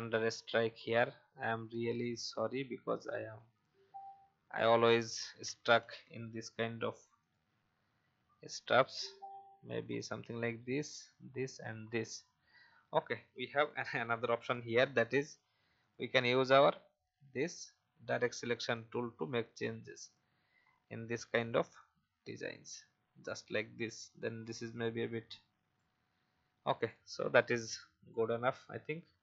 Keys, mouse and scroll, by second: 0.8 shift+click, 5.7 ctrl+z, 7.2 click, 12.6-12.9 alt+scroll up 1, 13.3 v, 13.6 click, 14.6 a, 15.8-26.0 drag, 26.4 v, 26.8 click, 28.4 alt+scroll down 1.